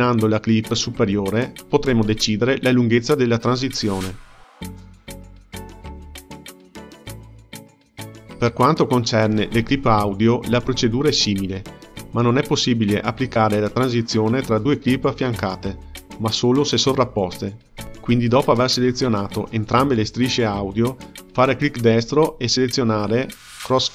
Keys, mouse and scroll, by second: 0.3 click, 1.2 space, 2.3 space, 2.8-5.7 drag, 5.7 space, 14.9 click, 15.8 shift+click, 16.4 right click, 20.5-23.9 drag.